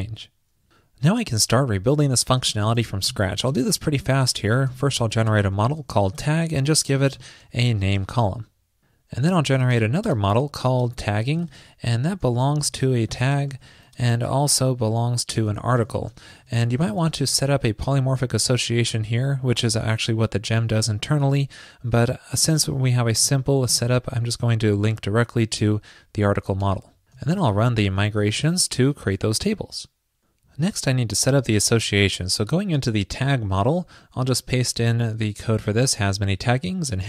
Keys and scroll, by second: 34.4 super+v.